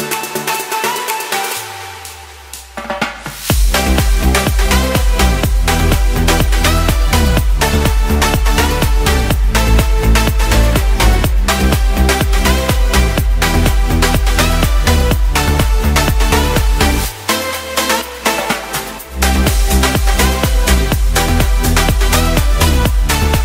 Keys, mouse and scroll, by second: 2.5 click, 4.4 click, 5.2-5.6 scroll up 2, 5.7 shift+middle click, 10.6 middle click, 11.2 shift+middle click, 11.7 middle click, 12.0 scroll up 1, 12.6 click, 13.1 scroll down 1, 14.1 click, 16.7 scroll up 2, 17.1 shift+middle click, 17.7 ctrl+middle click, 18.8 click.